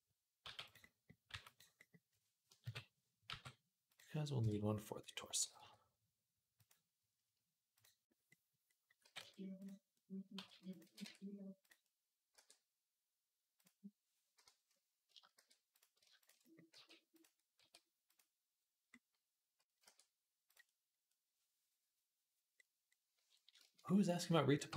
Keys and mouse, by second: 0.2 g, 1.1 r, 2.4 KP_3, 3.1 g, 4.2 KP_1, 5.2-24.7 middle drag, 5.2 g, 7.5 click, 8.8 g, 10.2 g, 10.6 g, 12.1 e, 14.2 l, 15.2 shift+n, 16.5 g, 17.4 r, 19.6 e, 24.4 g.